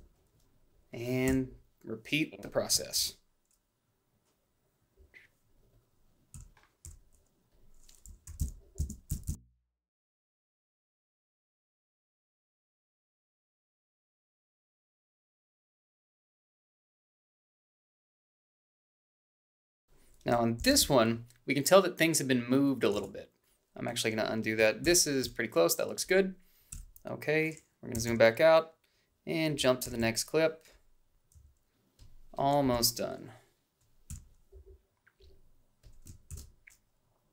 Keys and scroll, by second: 1.3 f, 2.9 ctrl+shift+f, 6.4 f, 8.3 i, 8.4 Down, 9.1 Up, 9.3 Left, 9.4 o, 9.7 b, 12.8 ctrl+b, 15.7-16.6 typing, 17.0 ctrl+b, 19.9-20.8 typing, 22.6 ctrl+z, 24.4 ctrl+b, 26.3 h, 29.5 =, 31.0 a, 32.3 Up, 33.7 f, 36.0 ctrl+shift+f.